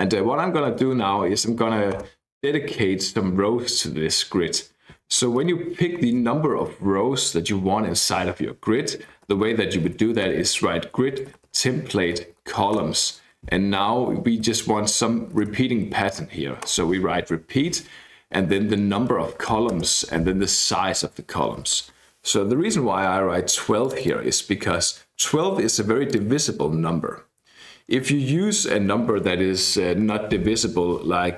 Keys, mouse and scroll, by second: 0.7 Tab, 1.6 Left, 2.3 Return, 2.4 Up, 5.2 Tab, 5.4 Tab, 8.8-12.0 typing, 12.2 Down, 12.5 Down, 12.8 Return, 14.2-16.1 typing, 16.7 Return, 18.7-19.8 typing, 21.3-22.3 typing, 23.8 click, 26.1 click, 29.9 alt+F12.